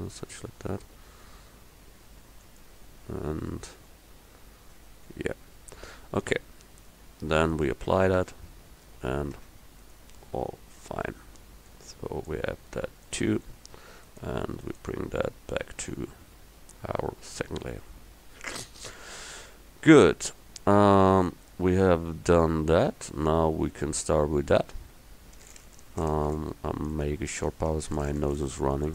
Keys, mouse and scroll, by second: 7.6 click, 8.3 Tab, 9.5 Tab, 15.9 m, 19.2-23.2 middle drag.